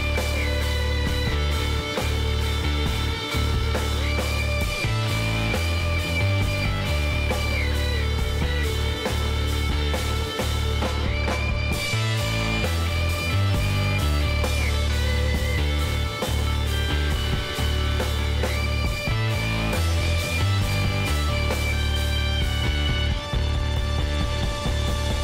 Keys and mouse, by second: 2.5-8.2 middle drag, 5.0 k, 8.6-12.6 drag, 12.6-14.4 middle drag, 14.4 click, 14.4 s, 16.9-20.4 middle drag, 17.2 Tab, 18.8 Tab, 24.6 click, 25.0-25.2 middle drag.